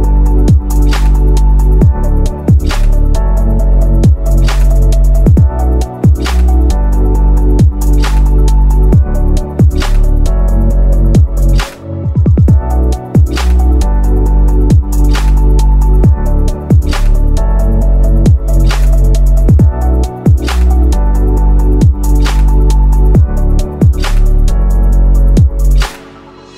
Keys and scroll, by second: 5.7 shift+F2, 6.1 F3, 23.4 space.